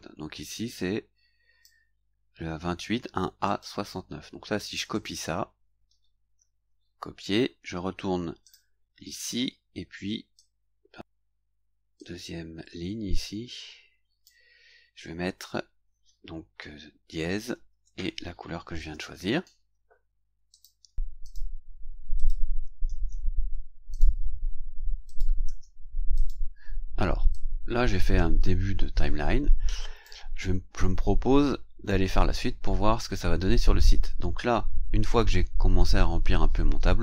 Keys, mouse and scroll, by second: 0.6-1.8 drag, 3.4 right click, 4.9 click, 6.4 ctrl+c, 8.4 click, 10.4 click, 12.0-14.4 drag, 18.8 ctrl+v, 20.5 click, 21.2 click, 22.2 click, 22.9 ctrl+c, 23.9 click, 25.1 ctrl+click, 25.5 ctrl+v, 26.1 click, 27.3-30.2 drag, 31.2-31.5 scroll up 1, 31.8 scroll up 1.